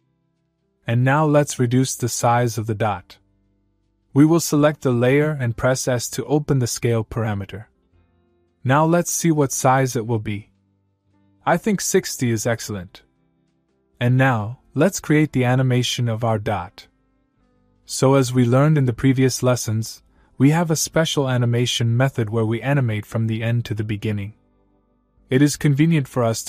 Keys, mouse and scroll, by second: 0.1 click, 5.0 click, 5.3 s, 6.7 click, 10.6 click, 13.3 click, 24.5 click.